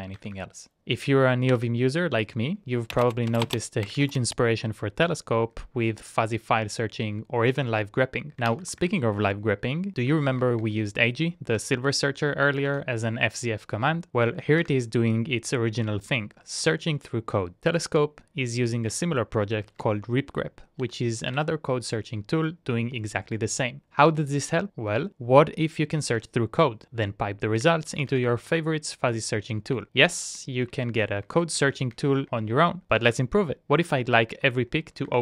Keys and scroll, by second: 0.0-1.6 typing, 1.8 Return, 3.8-4.7 typing, 5.5 Up, 5.7 Up, 5.9 Up, 6.1 Up, 7.2-9.1 typing, 10.0 Up, 10.2 Up, 10.4 Up, 10.6 Up, 14.1-14.8 typing, 19.4-22.0 typing, 27.7-28.8 typing, 30.0 shift+Tab, 30.4 shift+Tab, 31.2 ctrl+Up, 31.4 ctrl+Up, 31.6 ctrl+Up, 31.9 ctrl+Up, 33.4 Down, 33.6 Down, 34.3 Up.